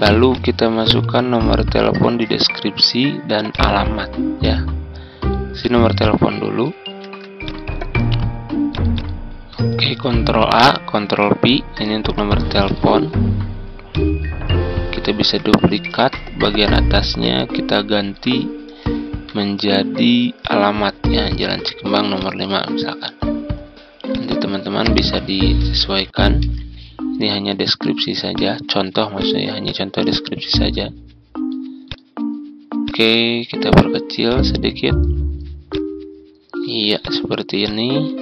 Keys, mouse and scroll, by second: 1.1 Tab, 3.4 click, 7.4 click, 9.5 ctrl+a, 12.6 click, 15.8 ctrl+d, 16.4 click, 18.9 Tab, 20.4 click, 22.1 click, 25.5 ctrl+a, 28.2-35.3 drag, 36.3 ctrl+click, 36.9 click.